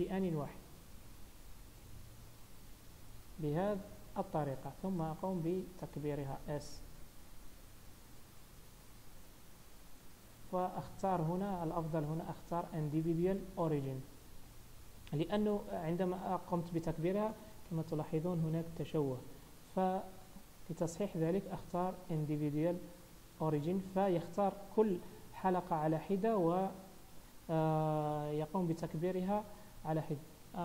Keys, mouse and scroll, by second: 0.7 alt+shift+click, 2.7 alt+shift+click, 3.0 scroll down 2, 3.3 middle click, 5.8 scroll up 1, 6.9 s, 13.0 click, 15.6 s, 17.0 middle click, 17.7 shift+middle click, 18.7 middle click, 19.9 ctrl+z, 21.0 click, 26.5 scroll up 1.